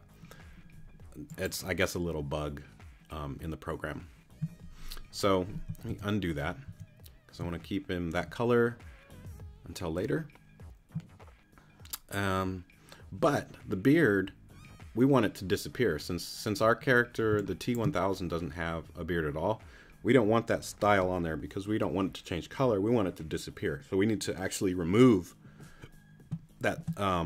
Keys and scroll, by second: 5.9 super+z, 17.3 space.